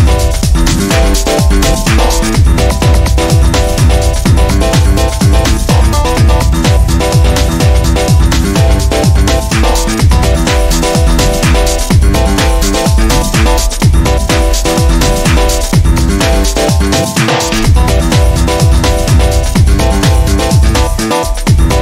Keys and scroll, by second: 5.0 ctrl+z, 15.5-16.5 typing.